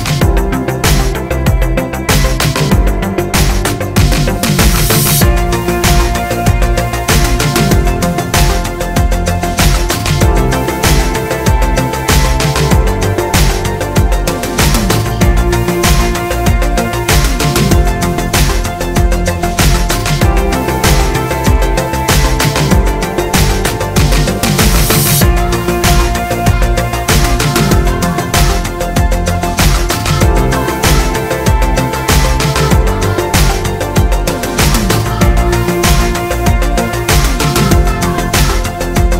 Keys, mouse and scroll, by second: 0.0 click, 0.8-3.7 middle drag, 1.7 scroll down 1, 3.7 click, 5.1-6.7 middle drag, 5.6 g, 6.7 click, 7.2-9.3 middle drag, 8.6 g, 9.3 click, 9.4-10.9 middle drag, 10.9 click, 11.9-20.4 middle drag, 18.5-19.0 scroll up 2, 19.7-20.4 scroll up 2, 20.4 click, 21.9 g, 22.9 click, 23.1-26.8 middle drag, 24.3-24.9 scroll down 2, 25.7 g, 26.8 click, 27.0-31.9 middle drag, 28.5 scroll down 1, 29.2 r, 31.3 click, 31.9 click, 32.2-38.0 middle drag, 34.4 scroll down 1, 35.7-38.0 scroll down 1, 38.0 click.